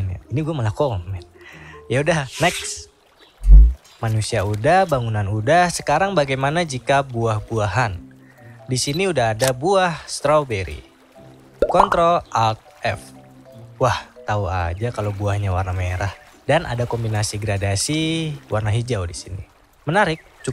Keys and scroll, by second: 11.8 ctrl+alt+f.